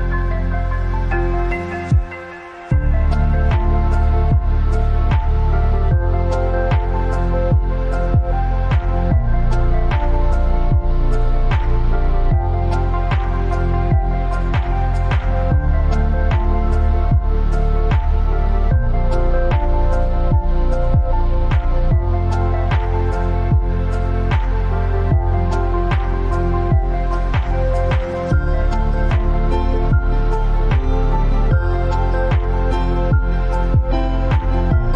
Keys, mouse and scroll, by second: 0.7-1.7 alt+scroll up 4, 2.1 click, 2.7 ctrl+t, 3.8-9.9 shift+drag, 14.2 alt+scroll up 1, 15.0 alt+scroll up 2, 15.7 click, 16.3 ctrl+t, 17.3-19.1 drag, 23.9 click, 26.6-34.9 drag.